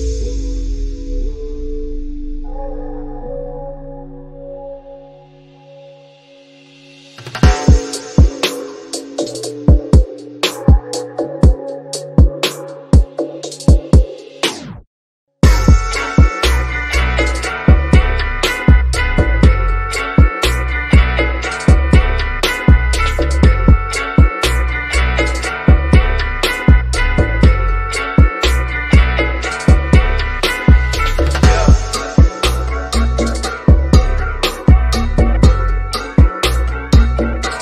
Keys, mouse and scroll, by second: 1.4 click, 4.9 scroll down 1, 5.8 shift+middle click, 6.6-8.5 scroll up 1, 8.8 click, 10.0 scroll down 1, 10.7 click, 12.9 scroll down 1, 14.2 scroll down 1, 14.4 shift+middle click, 15.0-15.3 scroll down 1, 15.4 shift+middle click, 16.2 scroll up 1, 17.0-19.3 middle drag, 19.3-19.7 scroll down 1, 19.8 shift+middle click, 22.9 click, 26.0-26.3 scroll down 1, 26.7 scroll down 1, 26.9 shift+middle click, 27.7 shift+middle click, 28.6-29.0 scroll up 1, 29.2 shift+middle click, 29.8 scroll up 1, 30.6 middle click, 31.0-31.4 scroll up 1, 32.7-33.1 scroll down 1, 33.1-36.3 shift+middle drag, 36.3 scroll down 1, 37.5-37.6 shift+middle drag.